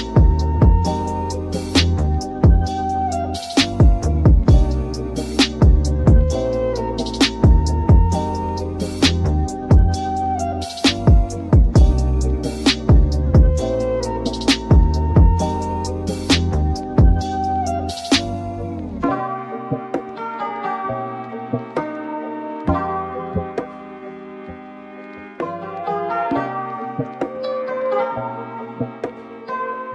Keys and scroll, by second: 0.5 super+z, 1.5 super+z, 8.7 super+-, 9.0 super+=, 14.4 super+z, 18.1 super+].